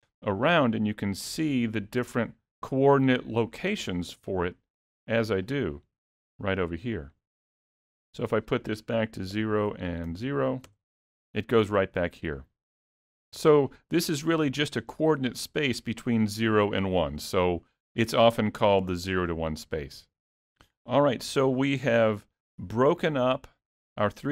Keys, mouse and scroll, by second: 0.4 click, 1.8 click, 5.0 click, 5.6 click, 8.3 click, 13.5 click, 22.7 n, 23.5 middle click.